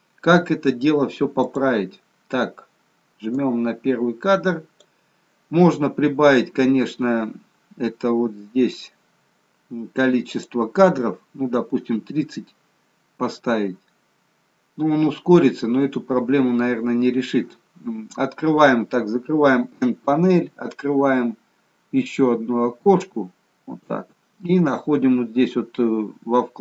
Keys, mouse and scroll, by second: 1.4 click, 4.3 click, 10.4 click, 19.8 n, 22.0 click.